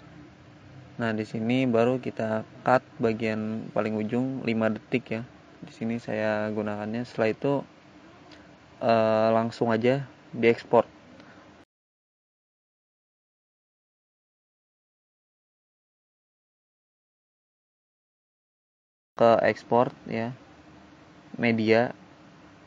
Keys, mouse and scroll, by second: 0.1 ctrl+z, 1.2 click, 1.4 click, 2.9 click, 4.8 click, 7.5 click, 9.8 click, 11.0 click, 14.3 click.